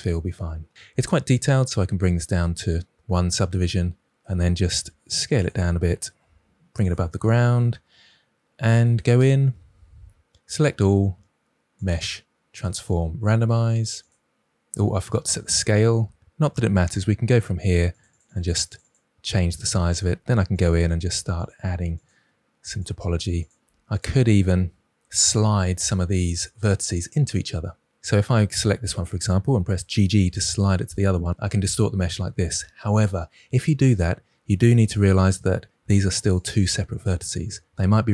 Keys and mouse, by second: 2.2 click, 4.7 s, 5.3 click, 6.2 g, 9.1 Tab, 11.8-14.8 drag, 17.6 click, 17.8 click, 18.0-19.1 drag, 20.0 g, 20.5 click, 21.3 click, 21.5 g, 21.9 click, 22.6 click, 22.7 g, 23.3 click, 23.6 g, 23.9-24.6 drag, 28.0-28.5 drag, 29.7 g, 29.9 g, 30.5-30.8 drag, 34.9-35.3 drag, 35.3 g, 36.3 click, 37.3 ctrl+z.